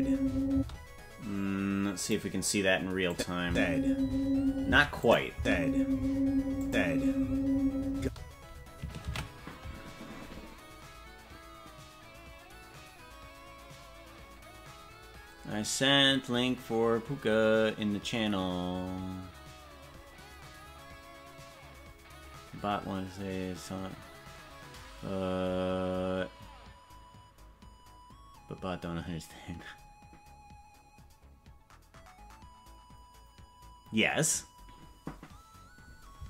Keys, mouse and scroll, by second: 0.5 space, 2.0 click, 3.1 click, 3.4 space, 4.7 space, 5.0 click, 5.3 space, 6.6 click, 8.0 space, 11.5 ctrl+s.